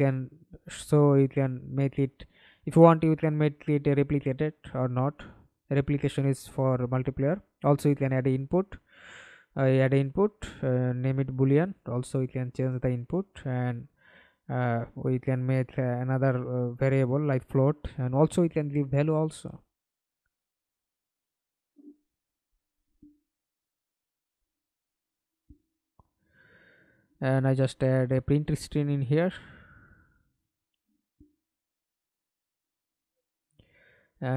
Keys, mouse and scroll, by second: 4.6-6.3 typing, 8.5 double click, 11.8-13.1 typing, 22.0 right click, 25.9-27.3 typing, 27.9 Return, 31.2 ctrl+a, 31.7-34.3 typing.